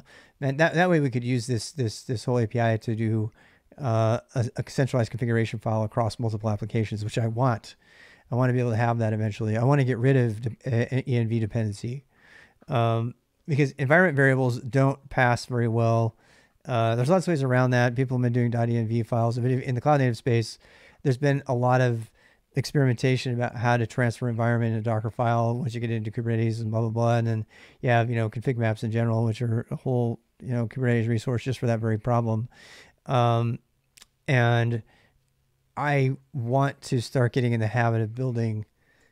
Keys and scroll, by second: 0.0-1.2 typing, 35.2-38.9 typing.